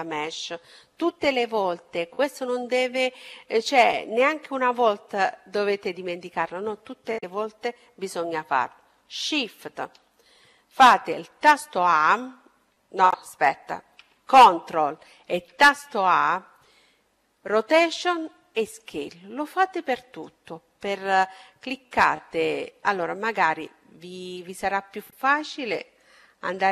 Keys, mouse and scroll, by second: 10.9 shift+a, 19.4-21.3 right drag, 25.4-26.7 drag.